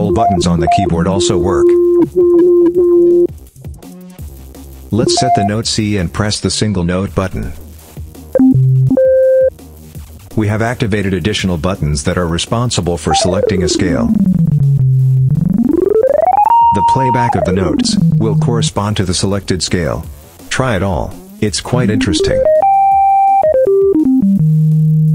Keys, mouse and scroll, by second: 4.7-5.4 drag, 6.2 click, 7.5 click, 8.1-9.4 drag, 10.0 click, 12.9-18.6 drag, 20.3 click, 21.5-25.1 drag.